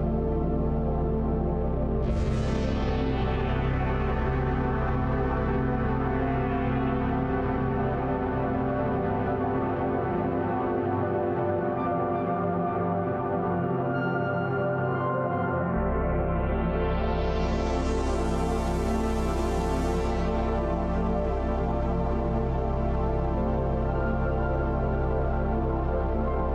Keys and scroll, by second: 0.9 ctrl+s, 4.3-5.0 typing, 24.9-26.5 typing.